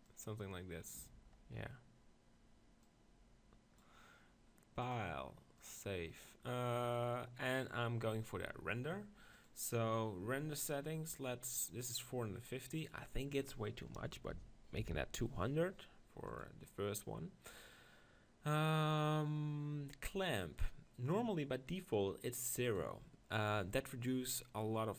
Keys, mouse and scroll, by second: 0.0-1.7 drag, 1.7-2.8 middle drag, 2.8-6.7 drag, 16.3 0.